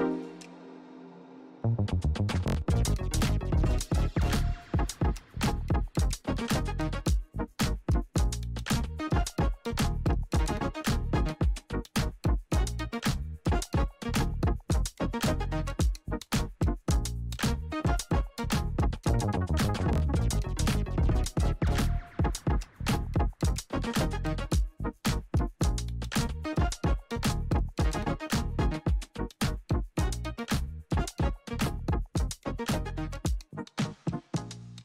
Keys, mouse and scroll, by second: 0.6 click, 2.2 =, 3.2 click, 5.9 click, 8.0 r, 9.1-11.4 drag, 15.1 u, 18.7 click, 19.0 j, 19.5-27.1 drag, 28.5-34.8 drag.